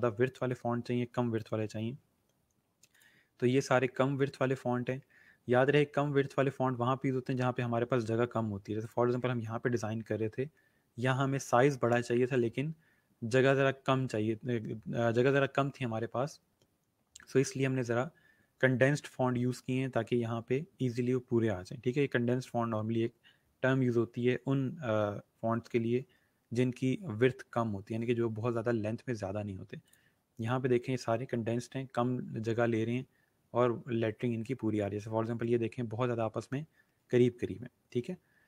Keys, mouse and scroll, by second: 3.3 scroll down 1, 6.6 scroll up 1, 8.8 click, 29.8 click, 30.8 scroll down 1, 37.6 scroll up 1.